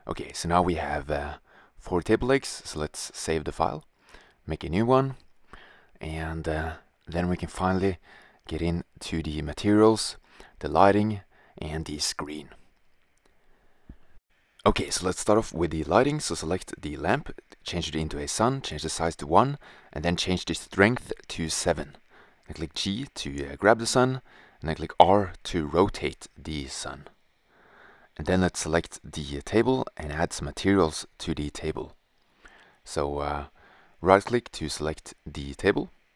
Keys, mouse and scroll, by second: 1.9-2.5 drag, 4.1 Return, 7.6 middle drag, 9.5 middle click, 14.2-14.6 middle drag, 15.9-16.3 right drag, 21.0 middle click, 23.1 click, 23.1 g, 24.6 r, 25.9-27.0 drag, 27.0-36.1 middle drag.